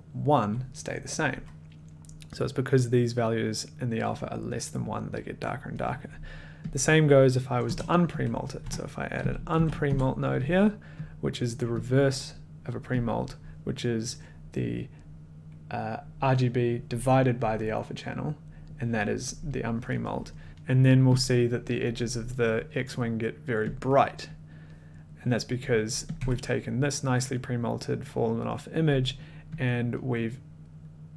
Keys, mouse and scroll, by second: 7.0 click, 7.6 BackSpace, 8.2 click, 8.6 Tab, 8.9-10.3 typing, 10.5 click, 11.1 click, 12.1 click, 13.0 click, 20.5 click, 21.2 click, 24.3 click, 26.1 click, 26.2 1, 29.5 click.